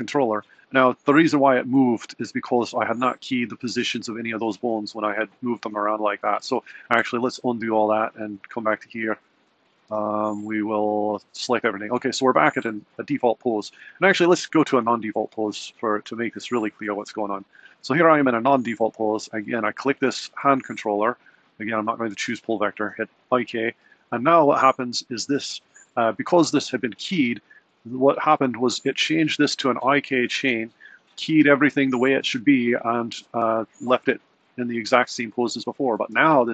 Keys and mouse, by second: 6.6 super+z, 7.4 super+z, 9.6 super+z, 10.9 super+z, 14.1 Right, 19.0 click, 22.3 click, 24.6 click, 25.4 d, 36.2 g.